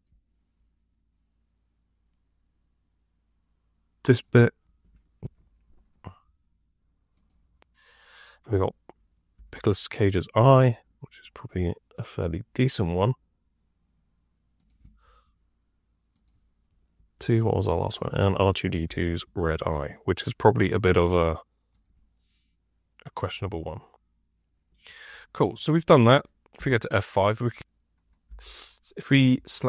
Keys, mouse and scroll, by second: 5.1 F2, 9.3 F6, 17.1 F2, 18.7 F6, 26.5 F5, 28.2 F6.